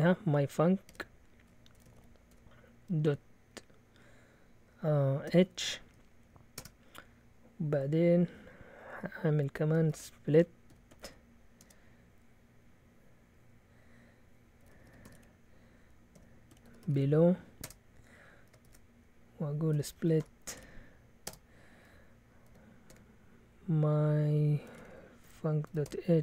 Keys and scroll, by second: 0.6-3.6 typing, 5.2 typing, 6.5 typing, 10.4-11.6 typing, 14.4-17.4 typing, 17.6 Return, 18.4-21.3 typing, 22.5-22.9 typing, 24.4-26.2 typing.